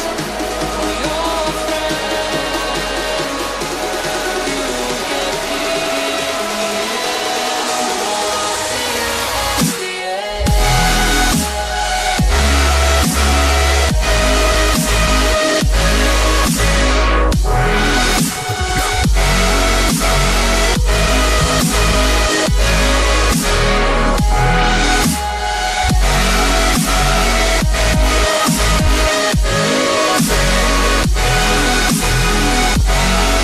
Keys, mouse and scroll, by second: 0.0 click, 2.1-2.6 scroll down 1, 2.6 click, 5.7-6.1 scroll up 1, 6.1 click, 7.0 click, 13.1 click, 20.6 scroll down 1, 22.3 click, 25.3 click, 27.3 scroll up 1, 28.0 click.